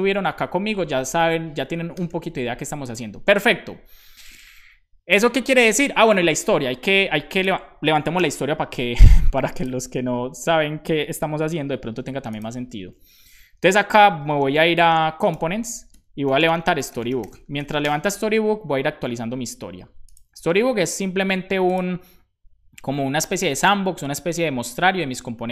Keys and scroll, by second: 0.0 shift+super+Right, 0.5 BackSpace, 1.9 BackSpace, 2.0 super+s, 8.2 super+j, 14.2 d, 14.8 space, 15.4 Tab, 15.8 …, 17.5 k, 17.7 Return.